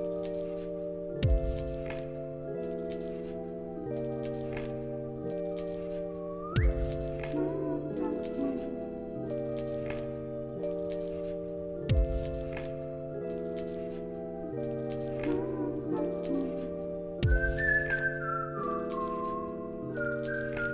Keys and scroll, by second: 5.9 z, 9.8 u, 13.7 ctrl+c, 13.9 ctrl+v, 15.1 z, 20.3 x.